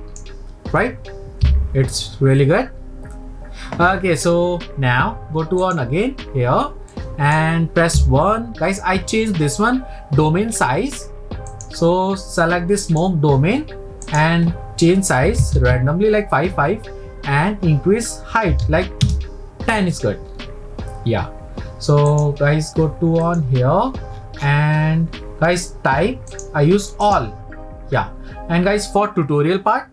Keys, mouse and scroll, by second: 1.5 n, 5.7 click, 6.9-8.0 middle drag, 8.0 KP_1, 10.5-11.5 scroll down 2, 11.5 click, 12.9 click, 14.1-17.2 drag, 20.2 scroll down 3, 22.1 click, 23.2 click, 23.8-24.6 scroll down 7, 24.6-24.9 scroll down 14, 26.3-29.4 drag.